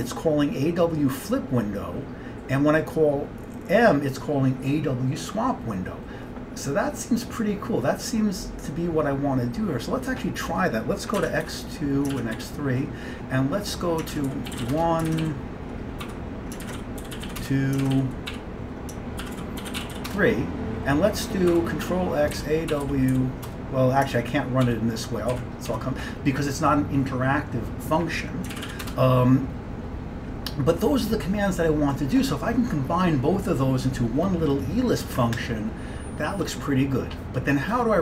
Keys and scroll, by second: 11.3 ctrl+x, 11.5 2, 12.2 ctrl+x, 12.4 3, 14.2-20.5 typing, 21.5-26.3 typing, 28.6 ctrl+x, 28.7 b, 28.9 Return.